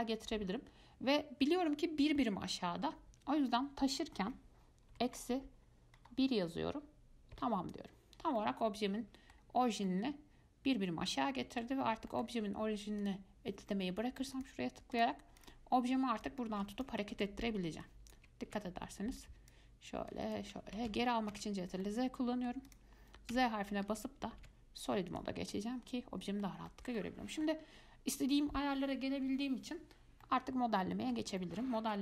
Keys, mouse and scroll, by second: 8.6-10.0 middle drag, 10.0 scroll up 2, 10.1-12.1 middle drag, 12.1 scroll down 2, 12.3 middle click, 13.2-15.2 drag, 15.6 click, 16.4 click, 17.3 ctrl+z, 18.0-18.7 drag, 18.7 ctrl+z, 19.4-21.1 drag, 21.1 ctrl+z, 21.5 ctrl+z, 22.0-22.9 middle drag, 22.9 click, 23.5 z, 24.1 z, 24.6 z, 25.7-30.2 middle drag, 30.4-32.0 middle drag.